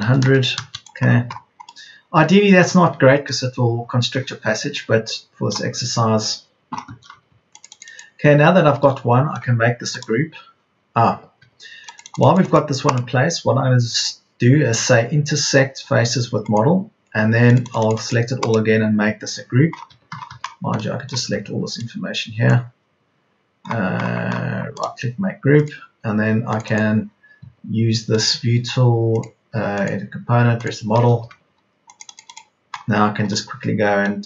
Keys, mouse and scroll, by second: 0.0 KP_0, 4.7 KP_0, 7.0 Escape, 19.7 Escape, 25.7 Escape.